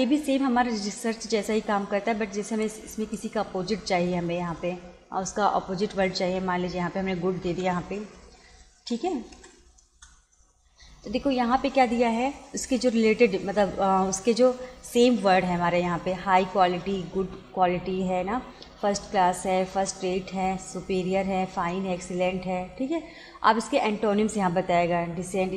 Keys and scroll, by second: 7.5 shift+g, 8.2 o, 9.4 d, 9.9 Return.